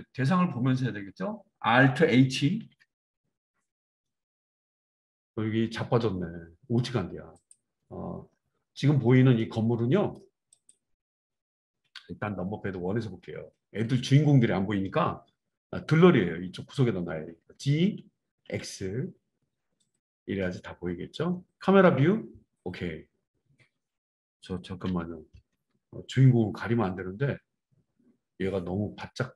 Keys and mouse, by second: 2.6 alt+h, 10.6 click, 10.7-29.3 middle drag, 12.2 KP_1, 17.4 g, 21.8 KP_0, 24.8 KP_1.